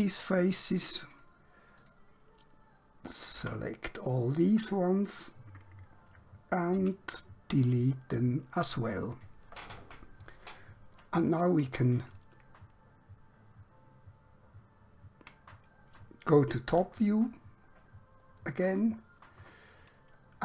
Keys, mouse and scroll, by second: 3.4 l, 6.9 x, 7.6 click, 12.8 middle click, 16.7 KP_7, 19.6-20.4 scroll down 1.